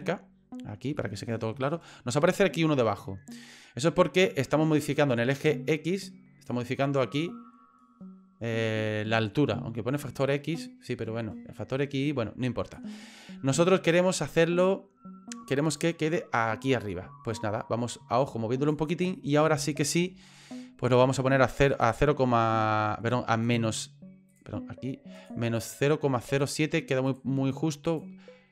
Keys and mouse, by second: 1.0 shift+middle click, 6.6-12.7 drag, 15.8-18.7 drag, 19.7 shift+middle click, 21.8 click, 24.3 click, 25.2 click, 25.6 click, 27.0-28.5 drag.